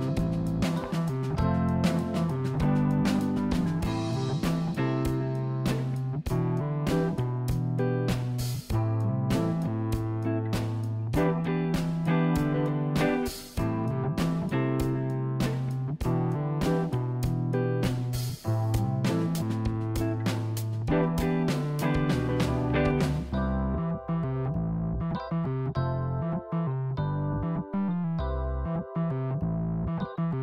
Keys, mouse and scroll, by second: 4.2 g, 5.2 click, 6.8-8.5 middle drag, 12.5-14.2 middle drag, 14.6 click, 15.0 click, 16.0-17.7 middle drag, 21.6 KP_1, 23.0 click, 23.6 Tab, 23.9 click, 24.4 click, 25.1 s, 29.0 g.